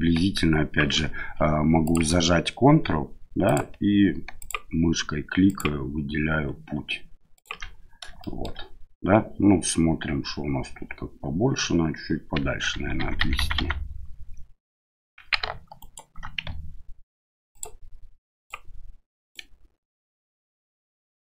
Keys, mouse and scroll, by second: 1.8 click, 3.4 ctrl+click, 4.4 ctrl+click, 5.4 ctrl+click, 7.3 ctrl+click, 8.2 shift+middle click, 12.7 ctrl+z, 13.0 ctrl+z, 13.2 ctrl+z, 13.4 ctrl+z, 13.6 ctrl+z, 15.8 right click, 18.3 ctrl+click.